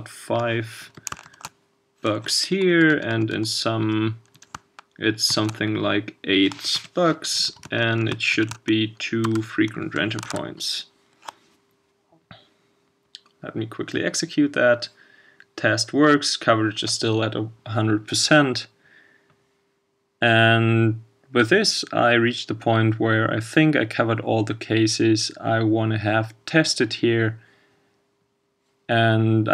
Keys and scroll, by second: 10.3 super+s.